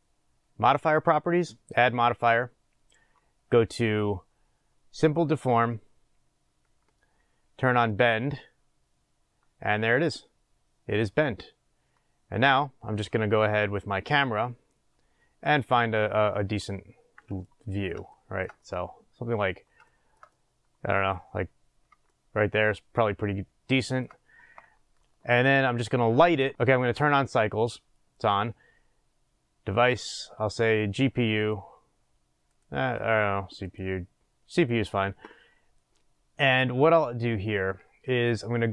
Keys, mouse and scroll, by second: 6.1-8.7 drag, 16.6-26.6 middle drag, 18.5-19.9 scroll up 2, 21.6-22.1 scroll up 2, 26.6 click, 31.4-38.7 drag.